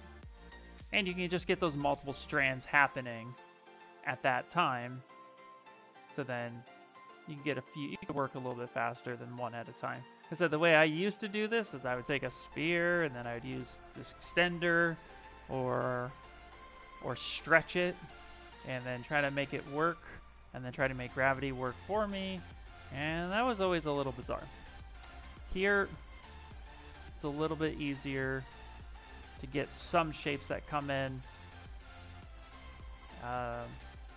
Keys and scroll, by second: 1.6 s, 11.0 s, 13.3 s, 25.6 shift+f, 26.0 shift+f.